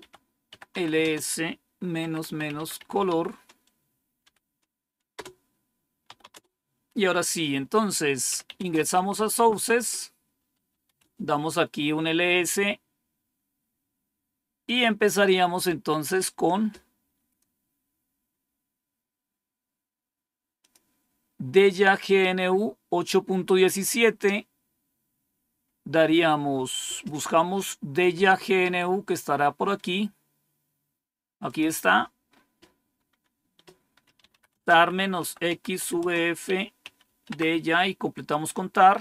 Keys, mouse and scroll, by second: 0.0-6.7 typing, 8.0-11.3 typing, 14.6 click, 16.0-17.5 scroll down 5, 18.2 scroll down 1, 20.5 click, 23.8 scroll down 1, 27.0 scroll up 1, 28.6 scroll up 1, 31.4 click, 31.8-34.0 scroll down 3, 32.0 click, 33.7-37.5 typing.